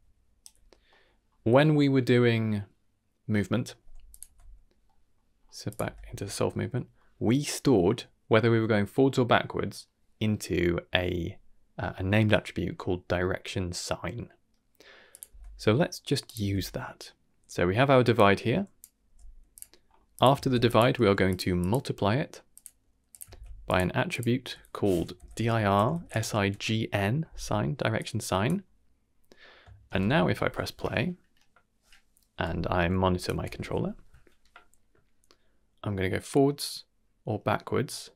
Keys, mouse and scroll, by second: 0.4 d, 0.5 d, 0.6 Tab, 0.6 click, 0.8 middle click, 1.2-1.9 scroll up 2, 4.0 click, 4.2 Tab, 4.8 middle click, 5.3-5.6 scroll up 2, 5.6 click, 5.8 Tab, 6.2-6.7 scroll down 2, 6.5 middle click, 6.9 middle click, 13.9-14.6 middle drag, 15.1 click, 15.2 Tab, 15.7 middle click, 16.2 click, 16.4 Tab, 17.0 middle click, 18.1-18.8 drag, 19.1 g, 19.7-20.1 scroll up 2, 20.1 click, 20.4 shift+d, 21.0 g, 21.6-22.6 drag, 23.1 click, 23.2 shift+d, 24.1-26.5 drag, 27.9-28.4 drag, 29.8 shift+space, 32.7 n, 33.1 click, 33.3 n.